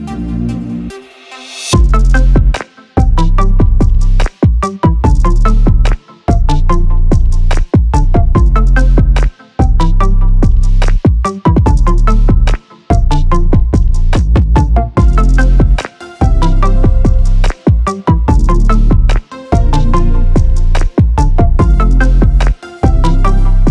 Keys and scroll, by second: 2.7 ctrl+z, 5.1 ctrl+z.